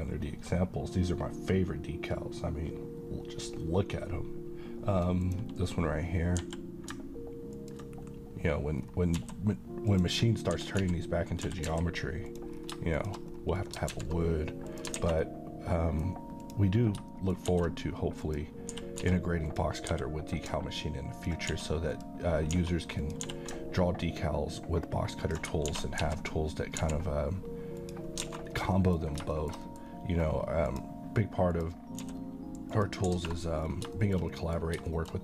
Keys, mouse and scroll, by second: 5.2 click, 6.3 g, 7.6 ctrl+click, 8.7 scroll down 1, 9.1 s, 9.9 click, 10.3 scroll down 1, 10.6 g, 10.8 z, 11.3 click, 11.5 g, 11.8 x, 12.3 click, 12.5 scroll down 1, 13.0 shift+click, 13.3-13.6 scroll down 1, 13.6 middle click, 13.9 alt+x, 14.7 click, 15.0 a, 15.3-16.1 middle click, 16.4 click, 16.9 scroll down 1, 17.2 shift+middle click, 17.5 shift+d, 18.3 click, 18.8-19.9 typing, 19.5 click, 21.2 ctrl+click, 21.5 s, 21.9 click, 22.5 s, 23.0 click, 23.3 g, 25.3 ctrl+click, 25.7-26.8 typing, 27.8 click, 28.3 alt+a, 28.4-28.8 scroll down 1, 28.8 middle click, 29.1 scroll down 1, 29.4 shift+middle click, 29.7 middle click, 29.9-30.7 scroll up 1, 30.7 click, 32.0 s, 32.7 click, 33.1 a, 33.6-33.9 scroll down 1, 34.0 middle click.